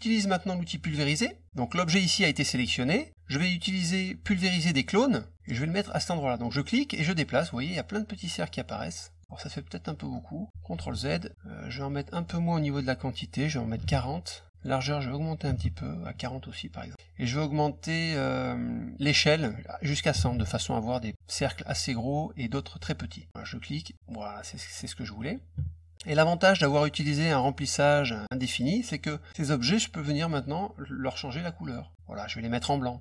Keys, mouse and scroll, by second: 0.8 click, 6.5-9.2 drag, 9.2 middle click, 11.8 click, 14.5 click, 19.2 click, 23.3-24.7 drag, 26.0 click, 29.2 click, 31.6 click.